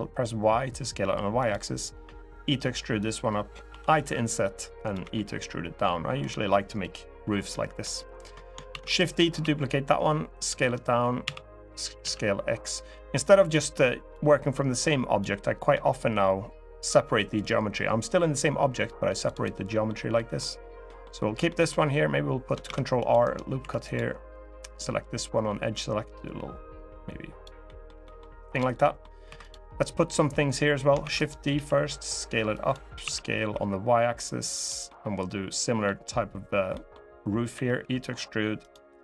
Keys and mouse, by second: 1.1 click, 1.8 e, 2.7 click, 3.4 i, 4.5 click, 4.7 e, 5.9 click, 8.4 shift+d, 9.1 s, 10.1 click, 11.0 s, 11.7 x, 13.1 click, 13.9-14.9 drag, 15.4 e, 17.1 click, 19.4 middle click, 19.9 middle click, 20.6 middle click, 21.2 middle click, 22.4 ctrl+r, 23.3 2, 23.6 click, 24.6-27.2 drag, 27.4 middle click, 27.8 middle click, 28.2 click, 28.5 middle click, 29.2 3, 30.7 shift+d, 31.3 s, 32.2 click, 32.8 s, 33.1 y, 34.3 click, 34.6 middle click, 36.5 middle click, 37.3 e, 38.3 click, 38.9 i.